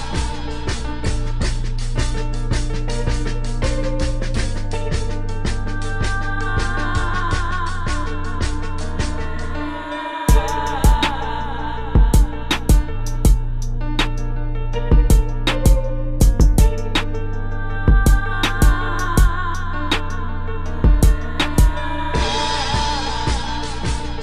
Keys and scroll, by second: 0.1 space, 1.7 space, 3.7-5.6 typing, 8.5 space, 10.6 space, 12.2-15.3 typing, 20.6 space.